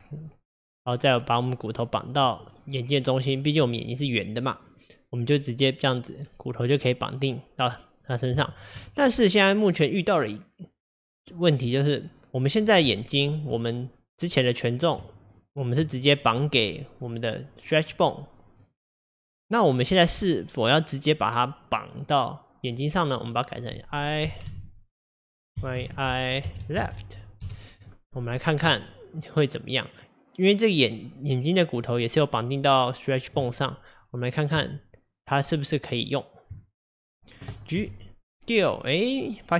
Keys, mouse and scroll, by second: 0.9 click, 2.5-6.7 middle drag, 8.4-11.9 shift+middle drag, 12.4 click, 12.9 Tab, 15.1 Tab, 18.6 click, 19.9-22.9 middle drag, 23.2 click, 23.3-26.3 drag, 30.0 click, 34.0 click, 34.6 Tab, 37.0 click, 37.8 g.